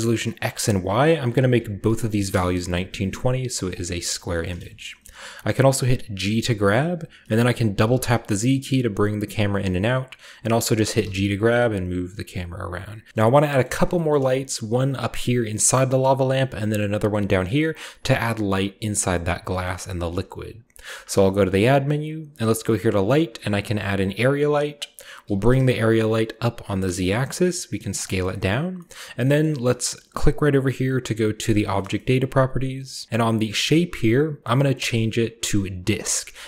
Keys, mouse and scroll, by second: 0.3 click, 1.5-1.9 typing, 2.3 Return, 3.3-5.0 scroll down 1, 3.5-6.3 shift+middle drag, 4.0 typing, 6.3 g, 7.6-8.7 typing, 10.0-11.0 drag, 11.0 typing, 13.1 a, 13.1 shift+middle click, 13.6-15.8 shift+middle drag, 13.6-15.8 shift+scroll up 1, 15.8-17.2 shift+scroll up 1, 16.0-17.2 shift+middle drag, 17.3-17.8 scroll down 1, 17.8-18.8 scroll down 1, 18.9-19.5 shift+middle drag, 18.9-20.9 scroll down 2, 19.6-20.9 shift+middle drag, 20.9 shift+a, 24.0 click, 24.7-25.4 scroll down 1, 25.4 g, 25.6 z, 27.0 click, 27.2 s, 27.9 click, 28.1-29.6 shift+middle drag, 28.2-31.4 shift+scroll up 1, 29.8-31.4 shift+middle drag, 31.4 click, 31.7-33.0 scroll up 1, 32.1 shift+middle click, 33.7 click, 35.9 click, 36.4 shift+middle drag.